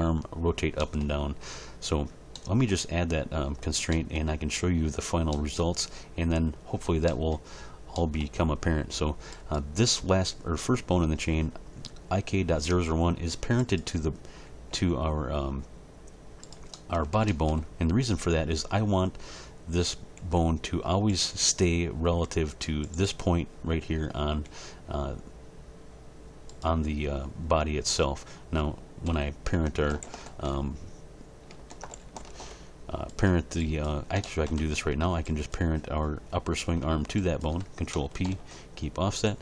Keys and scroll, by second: 14.7 g, 20.2 g, 22.2 g, 24.3 g, 29.1 a, 29.9 alt+r, 30.3 alt+s, 31.7 alt+r, 32.0 alt+g, 32.3 alt+s, 39.3 ctrl+p.